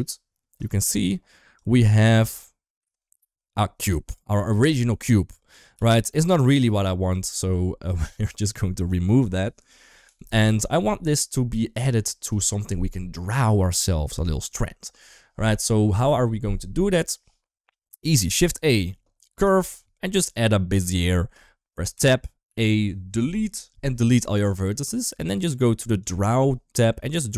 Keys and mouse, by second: 1.5-1.8 drag, 5.7 ctrl+z, 6.4 ctrl+s, 6.9 click, 7.5 shift+middle click, 9.9 Delete, 10.7 ctrl+s, 11.4 shift+middle drag, 17.9 shift+a, 21.8 Tab, 22.3 a, 23.3 Delete.